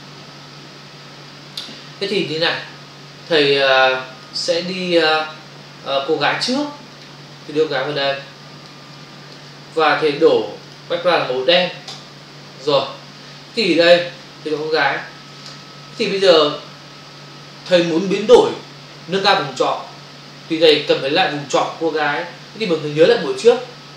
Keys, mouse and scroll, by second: 3.6 click, 6.6 click, 6.9 click, 7.0 double click, 8.0 click, 8.8 space, 8.9 ctrl+click, 10.2 click, 10.7 double click, 11.9 ctrl+BackSpace, 15.6 ctrl+click.